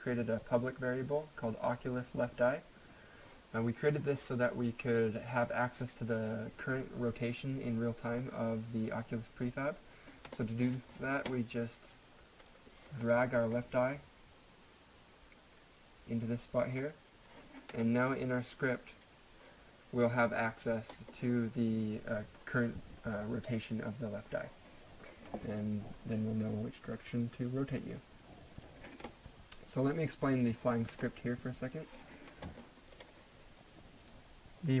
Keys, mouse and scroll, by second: 0.4 click, 6.9 click, 11.9 click, 18.9 click, 28.6 click, 29.9 click, 32.9-33.6 scroll up 1, 34.0 click.